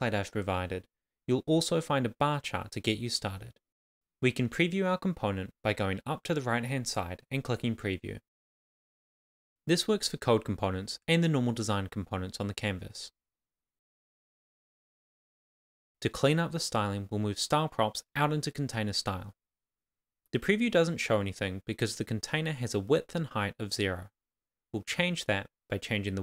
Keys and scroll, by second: 0.7 Left, 1.7 Return, 1.9 Up, 2.1 Tab, 2.5 shift+,, 3.7 shift+[, 4.1 Left, 4.3 shift+[, 4.4 shift+], 4.6 Left, 5.4 shift+;, 6.6 shift+;, 7.1 shift+5, 7.3 Right, 8.4 shift+c, 9.0 shift+;, 9.1 shift+space, 9.7 Right, 10.5 shift+., 10.7 super+s, 16.5 shift+[, 16.5 shift+], 16.7 Left, 17.5 shift+s, 18.0 Up, 18.5 Return, 18.7 Up, 19.8 shift+s, 20.3 shift+[, 20.3 Return, 21.4 shift+;, 21.4 shift+space, 21.7 Left, 22.0 shift+5, 22.1 Right, 22.5 Return, 23.0 shift+;, 23.1 shift+space, 23.8 shift+5, 23.9 super+s.